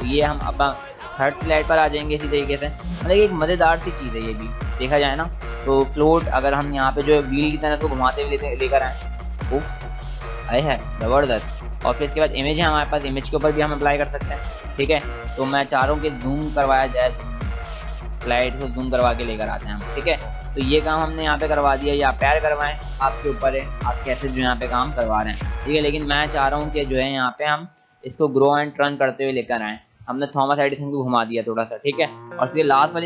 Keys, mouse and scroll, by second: 0.5 click, 3.2 click, 7.1 click, 11.0 click, 20.1 click, 26.2 click, 32.6 click.